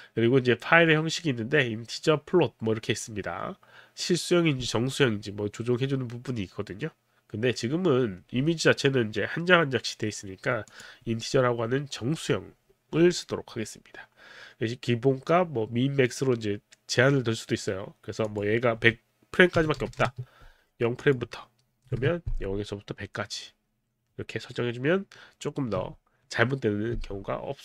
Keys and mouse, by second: 10.7 click, 18.3 click, 19.6 KP_1, 19.8 KP_0, 20.0 KP_0, 20.1 Return, 21.0 click, 21.8 click, 21.9 KP_0, 22.0 Return, 22.7 Return.